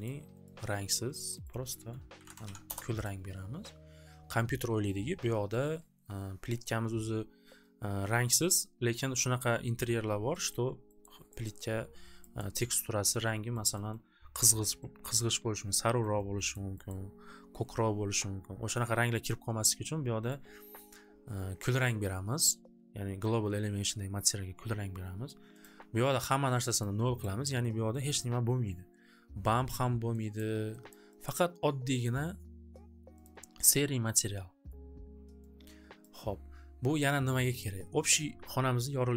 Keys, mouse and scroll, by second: 0.1 click, 0.5 click, 1.2 click, 1.3 click, 1.6 click, 1.7 click, 1.9-4.3 typing, 3.0 click, 6.0-6.4 typing, 10.5 middle click, 11.1 middle click, 11.6 middle click, 11.6 scroll, 12.4 scroll, 13.6-14.0 scroll, 14.8 scroll, 16.1 middle click, 16.6 middle click, 17.0 middle click, 17.2 scroll, 20.2 click, 25.8 click, 26.8 click, 27.4 click, 28.2 click, 30.3 click, 31.0 click, 31.2 click, 33.2 click, 34.6 click, 36.0 click, 37.6 click.